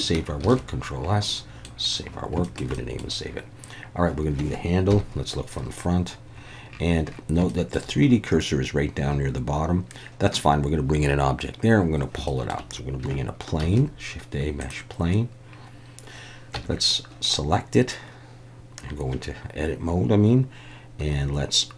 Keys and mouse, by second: 0.4 ctrl+s, 1.3-1.7 middle drag, 2.4 shift+middle click, 2.8 middle click, 4.9 KP_1, 7.5 shift+middle drag, 12.3 shift+middle click, 13.6 shift+a, 16.5 Tab.